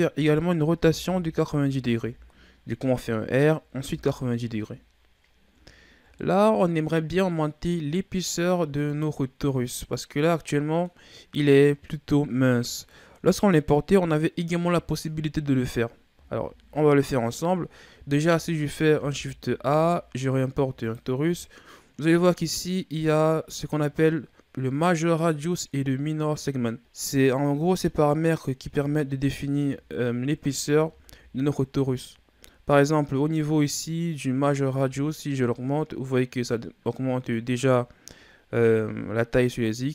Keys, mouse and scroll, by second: 0.7 r, 3.9 KP_3, 5.7-6.1 scroll down 1, 6.1-9.4 middle drag, 9.4-10.1 scroll up 1, 10.1-10.4 scroll down 1, 10.4-13.4 middle drag, 16.3 KP_1, 17.6-18.1 scroll down 4, 18.1-18.7 shift+scroll up 6, 18.9 shift+a, 26.8-28.3 drag, 28.3-28.8 scroll down 1, 28.8-30.4 shift+scroll up 18, 30.4-30.9 ctrl+scroll down 4, 30.9-34.5 shift+scroll up 3, 34.6-37.7 drag.